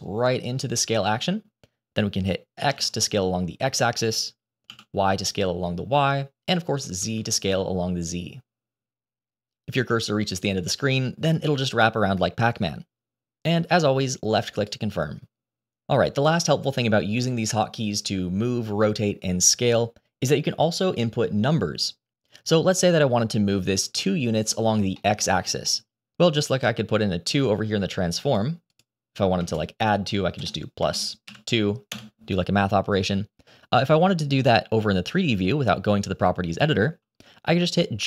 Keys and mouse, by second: 24.0-24.6 middle drag, 24.9-25.3 shift+middle drag, 25.5-26.0 middle drag, 28.3-31.9 drag, 37.1 g.